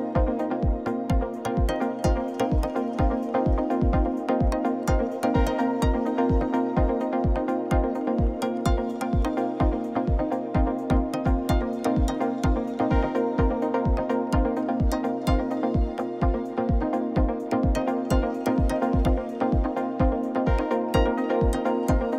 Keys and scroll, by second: 0.5 Tab, 6.9 g, 7.0 x, 9.3 0, 9.3 Tab, 9.5 1, 9.6 Return, 13.7 alt+a, 19.9 shift+a, 21.7 8, 21.8 Return.